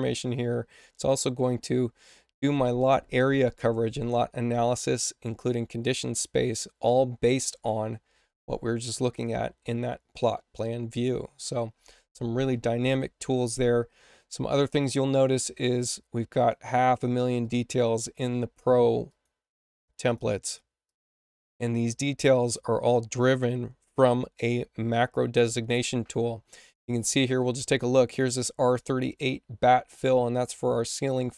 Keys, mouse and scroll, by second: 9.0 click, 14.4 click, 16.3 click, 16.8 click, 17.3 click, 17.9 click, 18.5 click, 19.0 click, 19.5 click, 20.0 click, 20.8 click, 21.0 click.